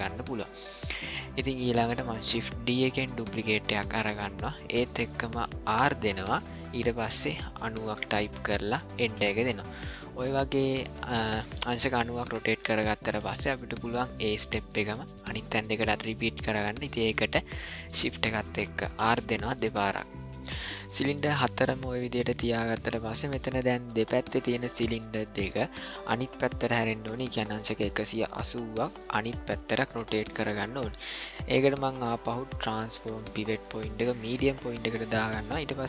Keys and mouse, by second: 2.7 shift+d, 10.6-11.3 shift+middle drag, 11.9 ctrl+middle click, 12.7 shift+middle click, 19.0 shift+r, 19.7 shift+r, 32.0-34.4 drag.